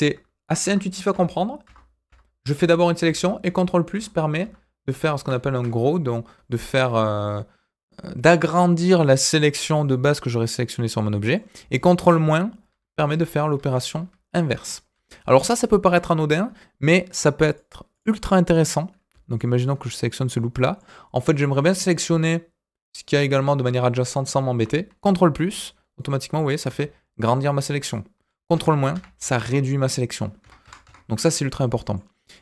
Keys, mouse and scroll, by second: 0.6 ctrl+KP_Add, 1.1 ctrl+KP_Add, 5.0 ctrl+KP_Add, 10.0 scroll down 1, 10.2-11.4 middle drag, 12.2 ctrl+KP_Subtract, 12.6-16.1 ctrl+KP_Subtract, 17.4 click, 17.9 click, 18.2 middle click, 19.2 alt+click, 20.2 middle click, 25.5 ctrl+KP_Add, 26.6 ctrl+KP_Add, 28.5 ctrl+KP_Subtract, 28.9 ctrl+KP_Subtract, 30.4 ctrl+KP_Add, 30.6 ctrl+KP_Add, 31.7 middle click, 32.3 click.